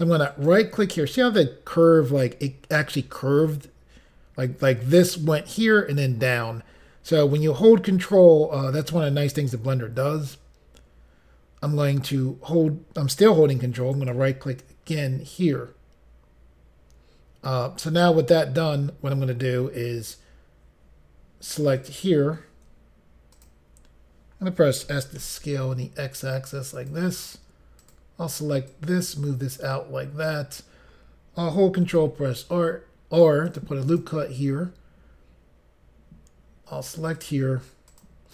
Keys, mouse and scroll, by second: 0.3 ctrl+right click, 13.9 ctrl+right click, 21.8 click, 24.9 s, 26.8 click, 27.8 click, 28.7 click, 31.9 ctrl+r, 33.5 click, 33.9 click, 34.0 double click, 37.2 click, 37.9 click.